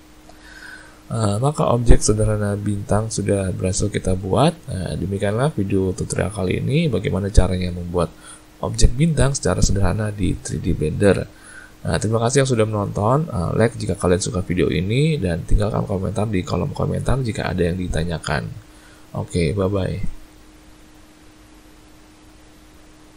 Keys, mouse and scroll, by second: 0.8 middle click, 2.8 middle click, 4.2 middle click, 5.0 middle click, 5.6 middle click, 8.4 middle click, 10.9 middle click.